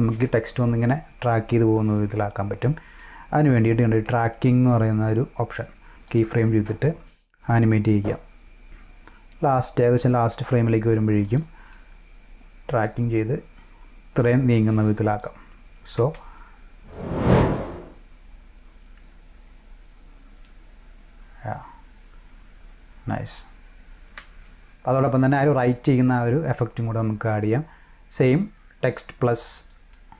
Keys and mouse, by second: 6.0 click, 7.8-10.0 drag, 11.2 click, 12.8 click, 15.2-15.8 drag, 16.0 space, 24.1 space, 28.4-29.6 drag.